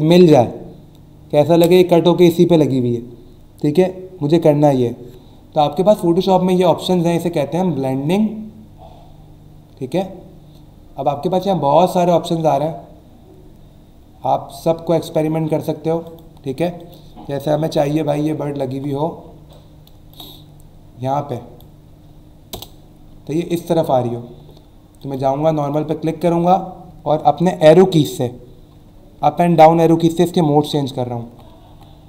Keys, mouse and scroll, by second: 6.8 click, 16.0 click, 16.8 click, 18.5 alt+scroll down 1, 19.5 alt+shift+click, 22.5 Return, 23.2 alt+scroll up 1, 25.0 click, 25.6 click, 30.1 Down.